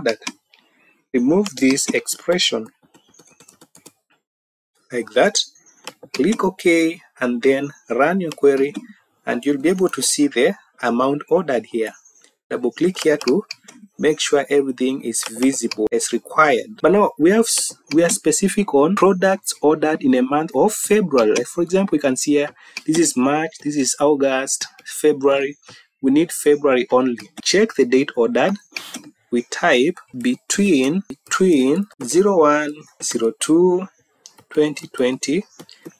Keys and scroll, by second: 23.1 Down, 24.1 Down, 29.4 Caps_Lock, 30.1 typing.